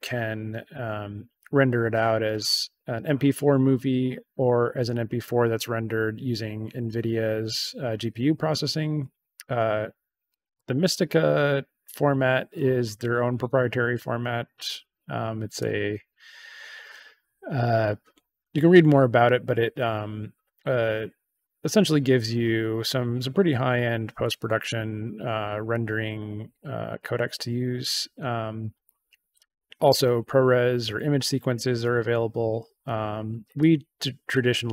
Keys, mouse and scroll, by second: 10.2 click, 15.5 click, 26.9 click, 27.7 click, 33.5 click.